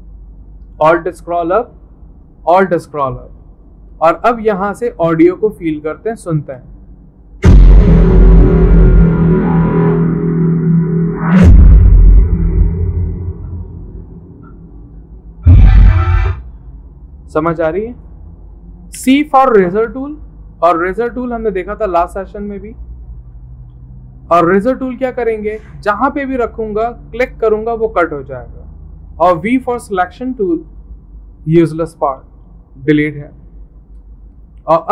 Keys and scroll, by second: 23.7 `, 25.7 typing, 33.1 Delete.